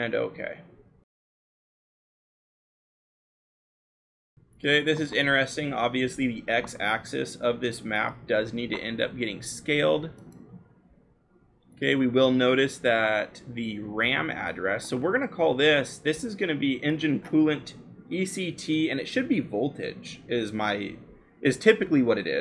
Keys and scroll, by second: 14.2 l, 17.6-22.4 typing.